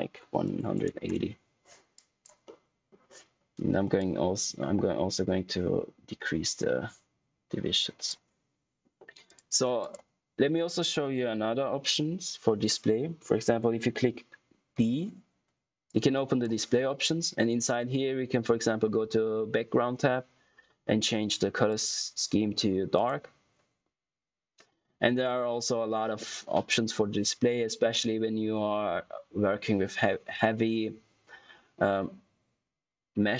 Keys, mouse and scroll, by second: 1.9 click, 2.4 middle click, 3.9 click, 14.7 d, 15.8 click, 21.6 click.